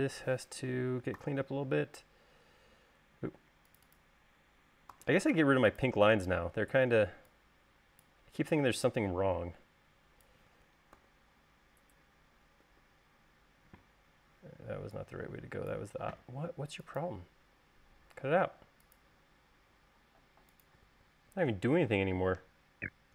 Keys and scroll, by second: 1.5 v, 3.7 space, 5.3 v, 11.3 u, 13.0 u, 22.8-23.1 typing.